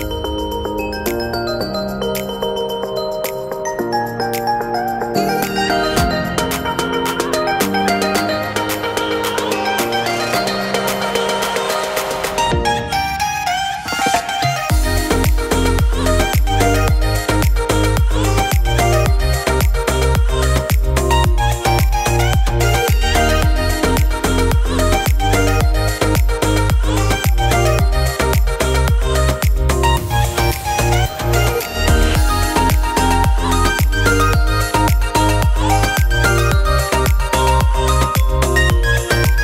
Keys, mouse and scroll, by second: 0.1 n, 2.9 scroll down 1, 3.1 middle click, 3.3 shift+middle click, 7.2 ctrl+a.